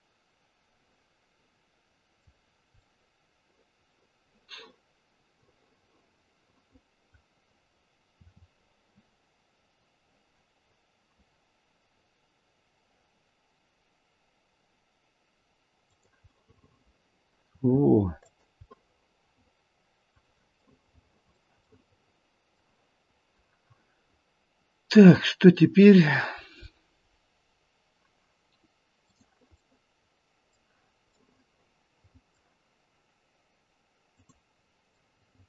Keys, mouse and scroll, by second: 0.4 middle click, 1.7 middle click, 2.4-2.8 scroll down 2, 2.8 middle click, 8.2 r, 16.2 middle click, 16.5 middle click, 16.8 middle click, 17.5 r, 18.7 middle click, 19.2 middle click, 19.5 middle click, 20.5 middle click, 21.0 middle click, 21.6 middle click, 29.0 click, 29.5 middle click, 31.2 middle click, 32.0 middle click, 34.1 click, 34.9 middle click.